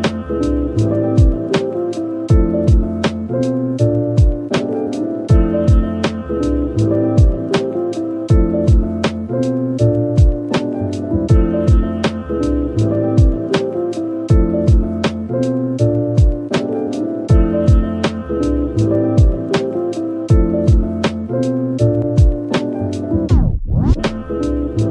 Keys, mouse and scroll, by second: 1.8-2.7 typing, 3.4 double click, 3.7 scroll down 1, 4.1 middle click, 6.3 double click, 6.7-7.7 typing, 8.5 double click, 8.8 middle click, 9.3 Tab, 9.7 Tab, 10.3 Tab, 10.9 typing, 11.7 right click, 12.3-12.7 typing, 14.5 typing, 16.6 typing, 17.1 middle click, 17.4 Tab, 18.6 Tab, 20.7-21.2 typing, 21.8 double click, 23.1 typing.